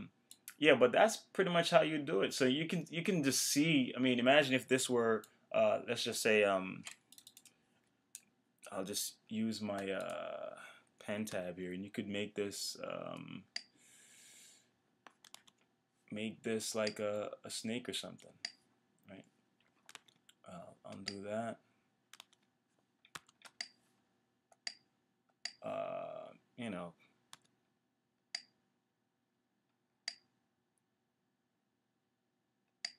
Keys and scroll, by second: 15.3 super+z, 19.9 super+z.